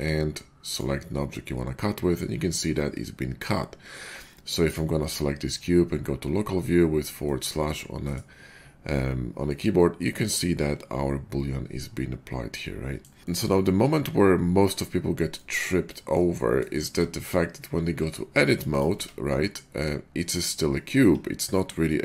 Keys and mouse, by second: 4.6 click, 4.7-6.5 middle drag, 6.5-7.2 drag, 7.2-13.0 middle drag, 13.0 click, 13.0 middle click, 13.5-17.0 middle drag, 17.9 Tab, 18.6 click, 18.9 Tab.